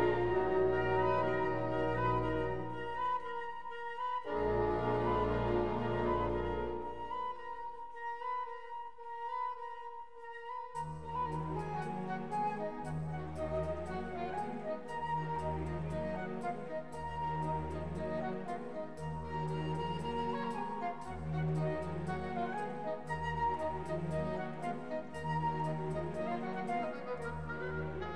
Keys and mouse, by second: 1.2-2.3 shift+drag, 2.8 alt+z, 4.9 KP_3, 5.2 alt+z, 6.5 click, 7.7-8.9 shift+drag, 10.7 alt+z, 16.6 p, 18.2 Tab, 19.3 Tab, 21.8 2, 23.7 shift+s, 26.4 Tab, 27.1-28.1 right drag.